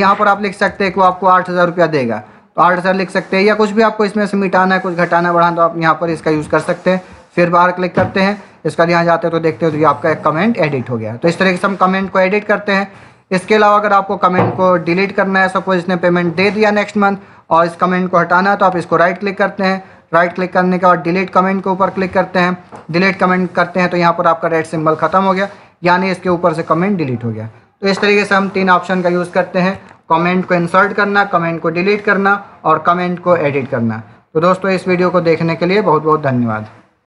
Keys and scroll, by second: 0.3 8, 0.6 0.